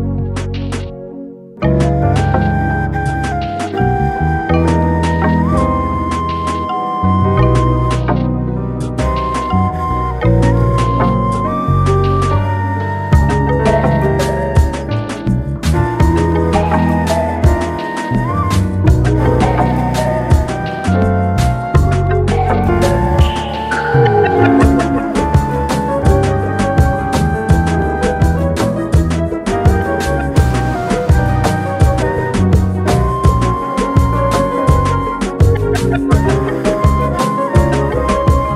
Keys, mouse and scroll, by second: 4.4 click, 6.2 ctrl+z, 6.4 ctrl+z, 7.0 Tab, 7.2-8.4 scroll up 4, 8.4 Tab, 8.9 click, 9.4 middle click, 10.3 g, 12.1 alt+middle click, 12.3 alt+middle click, 12.7 alt+middle drag, 13.3 click, 13.8 Tab, 15.0 ctrl+r, 17.1 click, 18.3 alt+middle click, 19.2 click, 22.8 click, 23.8 click, 25.0 x, 25.8 x, 26.7 scroll down 2, 28.0 ctrl+z, 28.8 click, 29.1 click, 30.0 x, 31.1 click, 31.8 click, 32.2 click, 33.7 g, 35.9 click, 36.2-36.5 scroll up 2, 36.5 shift+middle click, 37.6 g.